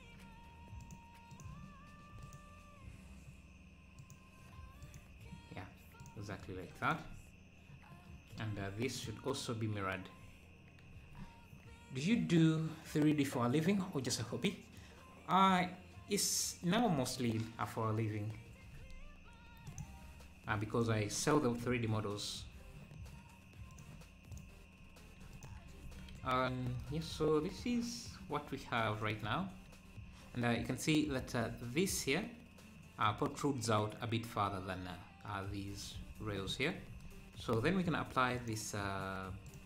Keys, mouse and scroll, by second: 6.8 click, 8.6-9.0 scroll up 1, 9.0-12.0 drag, 19.7-21.3 drag, 21.3 scroll up 2, 22.1 scroll down 2, 23.7-24.7 drag, 25.3 click, 25.9 ctrl+s, 27.2 scroll up 4, 28.3 scroll down 1, 29.4 scroll up 3, 30.9-32.1 scroll up 2, 36.8 scroll up 4, 38.4-39.6 drag.